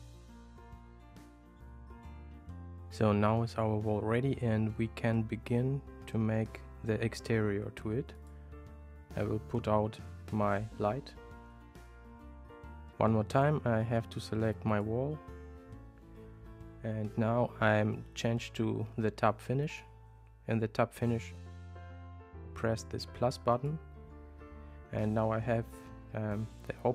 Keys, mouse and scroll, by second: 1.1 click, 1.3 drag, 2.6 click, 8.2 click, 11.5 g, 14.7 click, 19.7 click, 23.6 click, 23.8 typing.